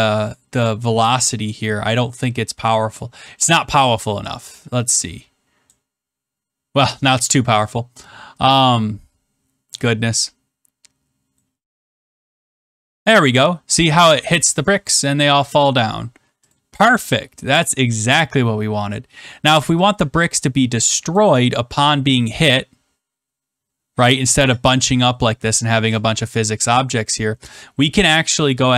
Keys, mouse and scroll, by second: 0.5 click, 2.1 click, 3.1 click, 5.6-9.2 drag, 11.3 click, 16.4 click, 17.8 click, 18.7 click, 21.0-22.2 drag.